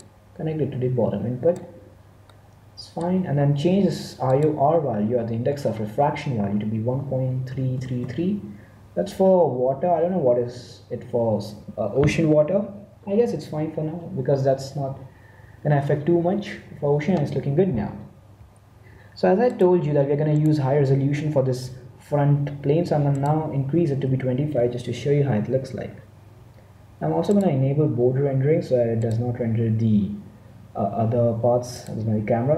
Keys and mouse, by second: 0.0-1.9 drag, 2.3-4.2 middle drag, 4.5-6.1 drag, 7.7 3, 19.4 click, 20.3 middle click, 21.2-22.2 right drag, 23.1-26.4 drag, 27.2-30.8 drag.